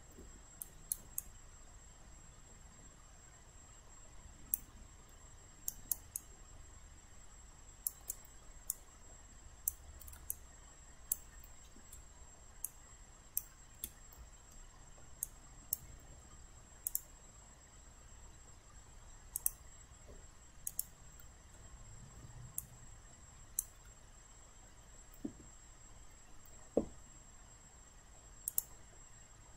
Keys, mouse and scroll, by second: 0.6 alt+right click, 1.2-4.6 alt+drag, 5.1 alt+middle click, 5.7 alt+right click, 6.2 alt+click, 8.7-10.1 drag, 10.3 alt+click, 12.7 ctrl+click, 14.6 alt+middle click, 15.2 alt+click, 16.9 click, 21.6 alt+middle click, 22.6 click, 24.4 alt+middle click, 28.5 click.